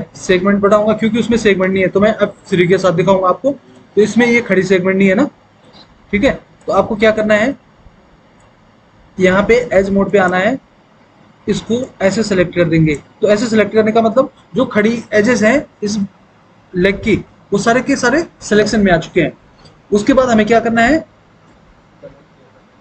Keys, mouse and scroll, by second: 2.7 F3.